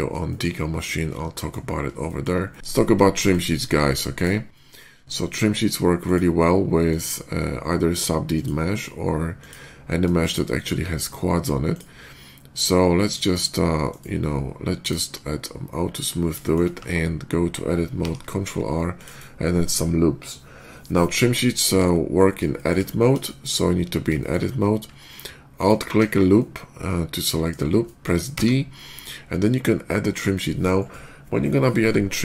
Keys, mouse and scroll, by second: 0.1 shift+middle drag, 0.6-1.3 shift+middle drag, 1.9 shift+middle click, 2.3-2.7 shift+middle drag, 3.0 shift+middle click, 4.0 shift+click, 5.0 shift+click, 5.9 click, 6.7 click, 8.2 click, 8.5 click, 9.2 click, 9.7 middle click, 10.0 shift+middle click, 10.4 shift+middle click, 10.9 shift+middle drag, 11.5 shift+click, 13.7 right click, 14.6 click, 16.0 middle click, 16.3 shift+middle click, 16.6 Tab, 17.8 ctrl+r, 18.4 middle click, 18.8 click, 21.5 Tab, 22.1 middle click, 22.4 shift+middle click, 22.7 shift+middle click, 23.1 shift+middle click, 24.0 shift+middle click, 25.4 alt+click, 26.2-27.3 alt+middle drag, 27.7 alt+middle click, 28.1 d.